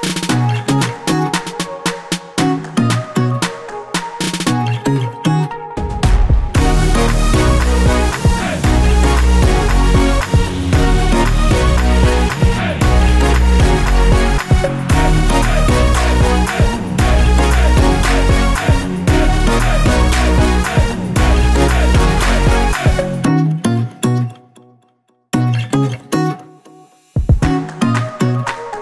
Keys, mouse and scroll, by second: 0.9 F4, 1.3 click, 2.5 Page_Up, 2.9 Page_Down, 3.1 Page_Up, 3.3 Page_Down, 3.5 Page_Up, 3.7 Page_Down, 3.8 Page_Up, 5.1 ctrl+o, 5.9 click, 6.5 click, 8.6 click, 9.7 F4, 10.2 click, 11.3 F9, 12.6 click, 13.7 ctrl+o, 14.4 click, 17.6 click, 18.1 F4, 18.5 click, 19.5 F9, 20.8 click, 21.5-21.8 scroll up 1, 22.2 scroll down 1, 22.9 click, 23.3 scroll up 1, 24.2 click, 25.8 scroll down 1, 26.1 scroll up 1, 26.4 click, 26.7 scroll up 1, 27.2 scroll down 1, 27.7 click, 28.3 click.